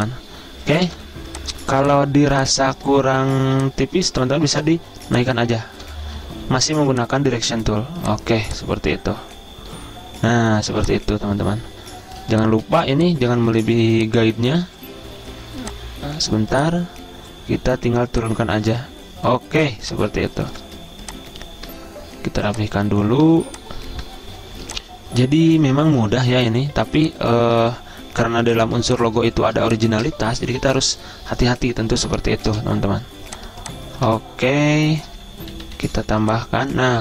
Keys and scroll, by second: 0.9 v, 4.7 a, 6.1 ctrl+z, 6.7 a, 10.6 z, 12.3 space, 16.2-16.9 typing, 19.8 z, 20.6 v, 23.3 a, 26.4 ctrl+z, 28.7-30.2 typing, 35.5-37.0 typing.